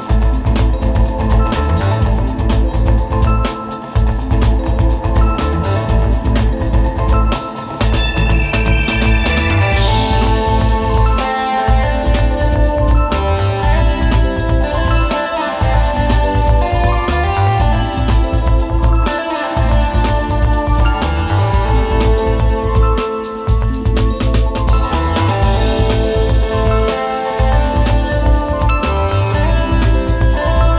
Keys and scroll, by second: 0.0 super+space, 0.9 alt+super+space, 2.6 space, 3.2 super+space, 4.3 space, 4.6 super+", 5.4 space, 6.1 space, 8.6 space, 9.0 space, 15.5 space, 16.0 space, 18.1 super+g, 19.3 super+", 20.9 super+z, 25.1 super+[, 25.7 space, 26.1 space, 26.6 super+space, 27.1 alt+super+space, 27.9 space, 29.1 space, 29.4 space.